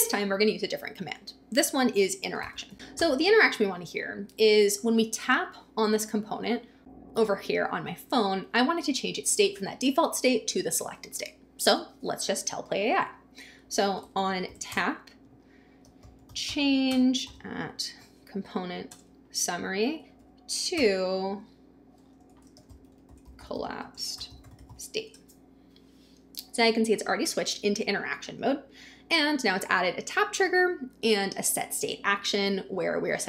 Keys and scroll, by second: 1.7-4.0 typing, 13.7-17.3 typing, 18.7 Down, 18.9 Return, 19.9-20.8 typing, 22.1-25.2 typing.